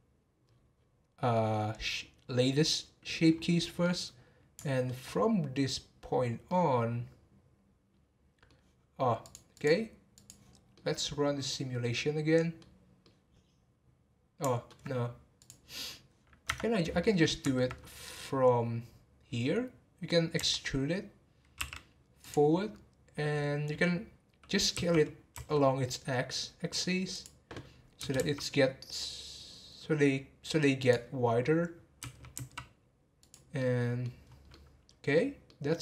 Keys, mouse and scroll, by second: 0.4-3.3 scroll down 7, 3.3-3.8 scroll up 4, 3.8-5.2 middle drag, 5.2 scroll up 2, 6.0 scroll down 3, 6.4-9.2 middle drag, 9.2-10.7 drag, 10.7-15.4 middle drag, 15.4-16.5 drag, 16.5 Tab, 17.0 middle click, 17.7-18.2 scroll up 2, 18.2-18.8 scroll down 4, 18.8 scroll up 1, 20.4 e, 22.5 scroll down 3, 24.7 s, 33.6 middle click, 34.2 scroll up 3, 34.5-35.8 middle drag.